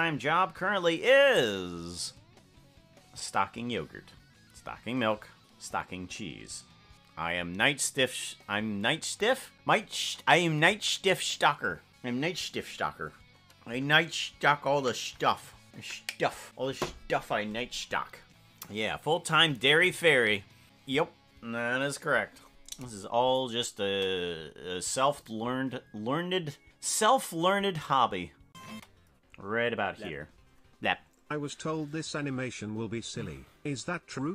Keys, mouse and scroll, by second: 22.9 click, 23.5 click, 24.1 space.